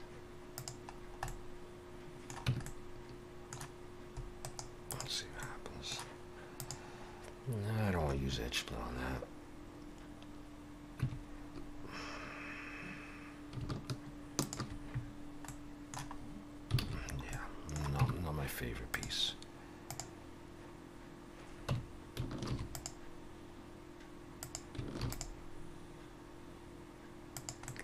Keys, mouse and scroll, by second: 0.9-2.1 scroll down 3, 1.3 middle click, 2.5 Tab, 2.7 middle click, 4.4 right click, 5.4 middle click, 6.6 click, 11.0 Tab, 14.4 alt+shift+click, 15.5 middle click, 16.2 scroll up 1, 16.8 alt+a, 17.0-17.4 scroll down 3, 17.3 middle click, 18.0 Tab, 18.9 click, 21.7 Tab, 22.5 ctrl+r, 25.0 ctrl+r, 27.7 middle click.